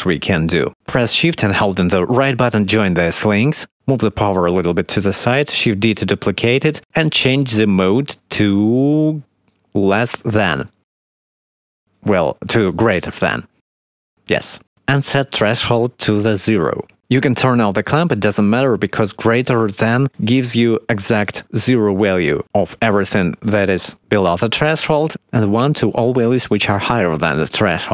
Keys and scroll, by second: 5.4 shift+d, 13.8 0, 13.9 Return.